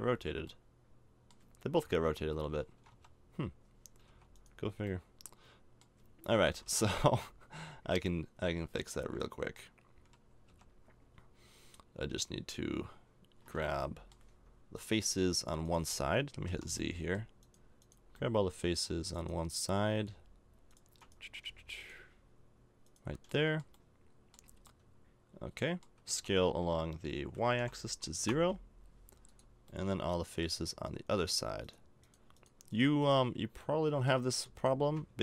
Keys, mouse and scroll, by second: 0.5 middle click, 1.3 middle click, 1.8 KP_1, 2.2 KP_Enter, 2.7 KP_Enter, 2.8 KP_3, 4.1 a, 4.3 right click, 5.0 middle click, 6.3 KP_1, 6.8 KP_3, 8.0 middle click, 10.5 KP_3, 13.6 middle click, 14.7-16.5 middle drag, 16.5 z, 16.8 middle click, 18.2-19.6 middle drag, 23.3-24.4 middle drag, 24.6-26.0 middle drag, 26.0 s, 29.7 middle click, 31.6-33.6 drag, 33.6-35.2 middle drag.